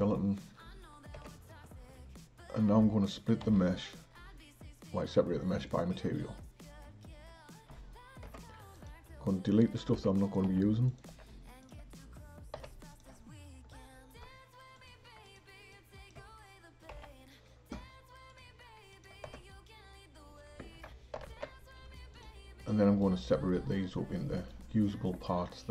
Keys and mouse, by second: 0.0 click, 1.5 Tab, 3.5 p, 8.3 Tab, 8.8 click, 10.0 Delete, 10.3 click, 10.5 Delete, 10.9 click, 11.1 Delete, 11.7 click, 12.6 h, 12.9 click, 14.8-15.4 drag, 15.7 click, 17.0 Delete, 18.3-19.1 drag, 19.3 Tab, 21.2 alt+h, 22.2 click.